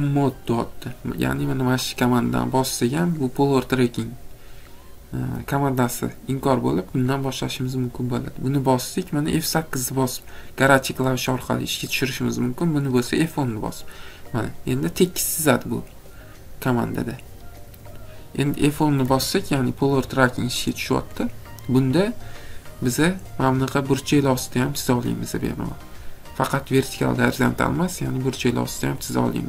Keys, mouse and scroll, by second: 7.1 click, 19.1 F10.